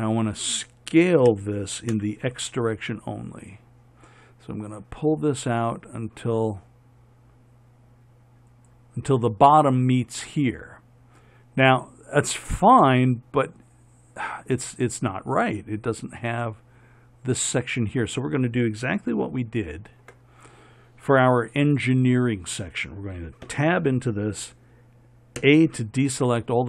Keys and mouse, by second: 1.5 s, 23.7 Tab, 25.6 a.